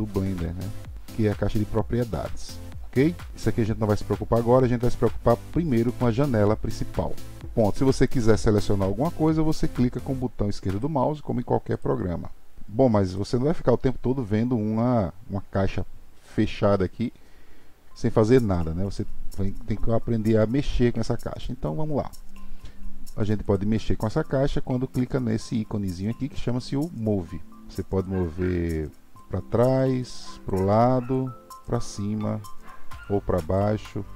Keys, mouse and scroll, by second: 7.4 click, 8.3 click, 10.7 click, 11.7 click, 12.6 click, 23.4 click, 28.1 click, 30.0 click, 31.1 click, 33.0 click.